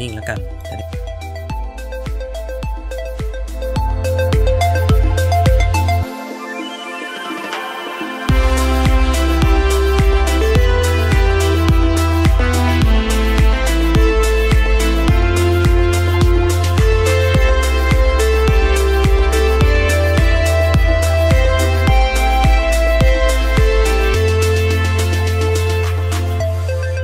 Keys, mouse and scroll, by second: 0.7 middle click, 0.8 click, 2.0-3.2 middle drag, 3.4-5.1 drag, 5.3-6.6 middle drag, 7.7 click, 9.1 middle click, 12.1 click, 13.3 middle click, 14.1 click, 14.9 middle click, 15.4 middle click, 15.9 middle click, 16.5-18.9 drag, 19.1-20.9 middle drag, 21.0 click, 22.4 middle click, 23.1-24.8 middle drag, 25.2 click.